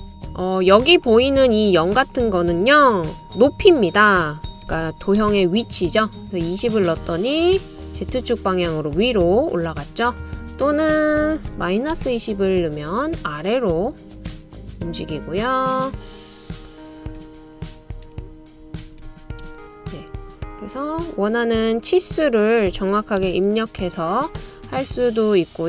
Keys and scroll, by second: 4.7-5.5 typing, 11.4-12.2 typing, 17.5-19.8 typing, 22.8-23.6 typing.